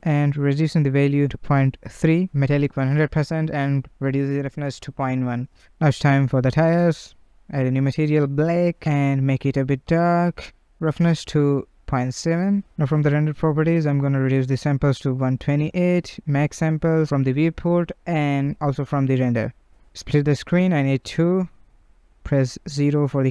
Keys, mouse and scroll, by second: 0.7-1.4 scroll down 1, 1.4 click, 2.0-3.0 scroll down 1, 3.0-4.2 drag, 5.4 click, 6.4 Left, 6.4 click, 6.5 Left, 7.8 Left, 7.8 click, 9.6-10.8 scroll down 1, 10.8-13.2 drag, 13.4 click, 14.2 click, 15.2-15.6 scroll down 1, 15.6-17.9 drag, 18.6 click, 19.4-21.0 drag, 21.0 KP_0, 21.8 scroll, 22.3-22.6 shift+middle drag, 22.6 scroll, 23.0 shift+middle click.